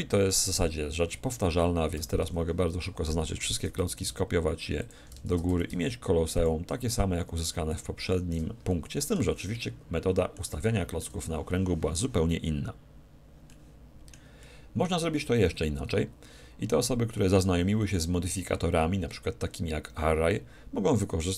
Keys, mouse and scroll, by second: 1.9 a, 2.2 a, 3.5 shift+d, 4.9-9.5 drag, 5.3 shift+d, 9.3-12.4 middle drag, 9.3 a, 13.1-17.1 middle drag.